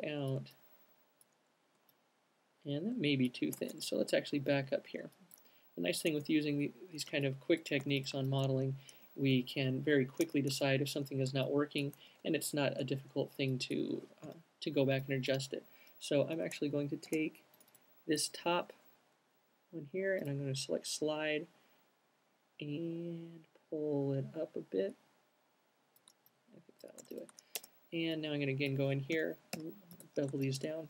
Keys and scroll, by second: 3.9 alt+super+z, 4.3 alt+super+z, 4.6 alt+super+z, 6.5 z, 7.3 q, 9.5 z, 10.5 z, 14.6 l, 16.8 space, 27.3 space, 29.5 l, 29.9 b.